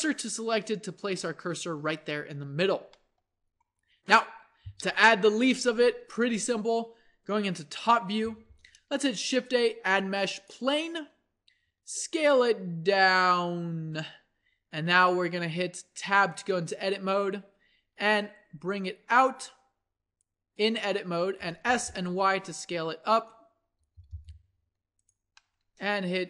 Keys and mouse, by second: 2.3 Tab, 3.8 a, 7.7 KP_7, 9.1 shift+a, 11.6 s, 16.0 Tab, 21.2 s, 23.8 g, 25.4-26.2 drag.